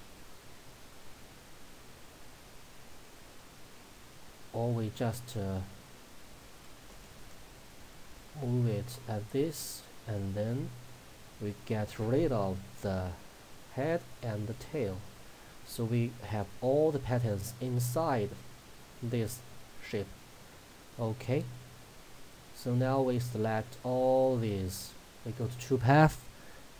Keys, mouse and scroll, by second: 1.9-6.9 drag, 6.9 Left, 9.7 click, 12.9 Delete, 14.1 click, 14.5 Delete, 21.3-25.5 drag.